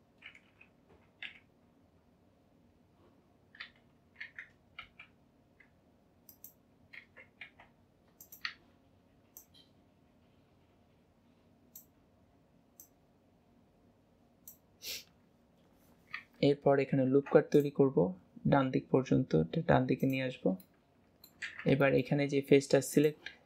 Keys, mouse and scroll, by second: 1.5 KP_7, 9.4 click, 11.6 click, 12.8 click, 20.7 middle click, 21.9-23.0 middle drag, 23.0 click.